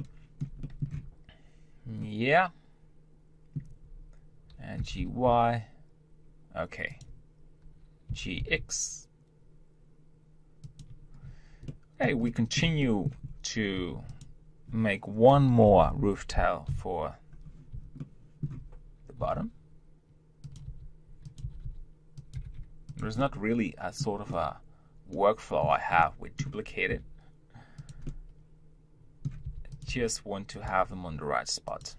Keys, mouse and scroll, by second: 1.0 Tab, 2.2-4.8 middle drag, 4.8 g, 11.7-13.2 middle drag, 13.2-13.8 scroll up 1, 13.8 Tab, 14.1 click, 15.7 ctrl+l, 18.0-19.2 shift+middle drag, 19.2 shift+d, 20.7 r, 23.2-25.7 middle drag, 25.7 scroll up 1, 26.0-27.0 middle drag, 27.0 g, 28.0-29.4 middle drag, 29.4 r.